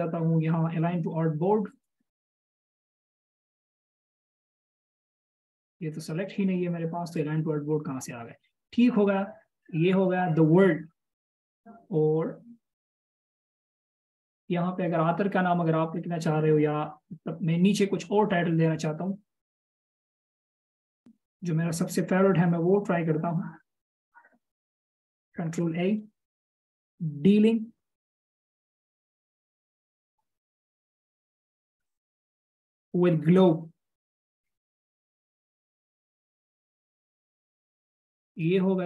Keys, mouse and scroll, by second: 3.6 double click, 7.7 double click, 12.0-13.8 scroll down 1, 13.8 scroll up 1, 23.2 alt+shift+click, 26.1 ctrl+a, 27.3-28.5 typing, 30.0-32.7 typing.